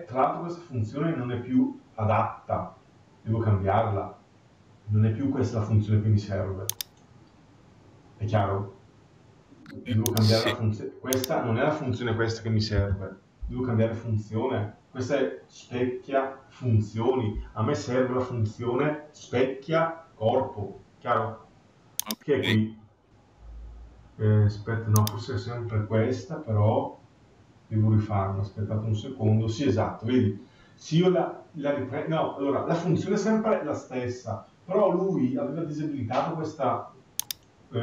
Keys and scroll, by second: 12.5 Delete.